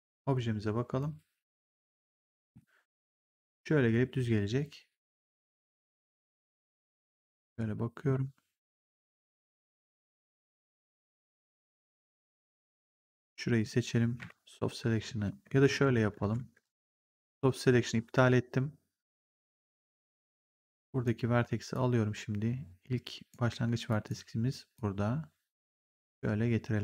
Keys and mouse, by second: 2.1 middle click, 4.9 click, 12.4 click, 14.1 b, 15.5 ctrl+z, 20.2 click, 23.8 click.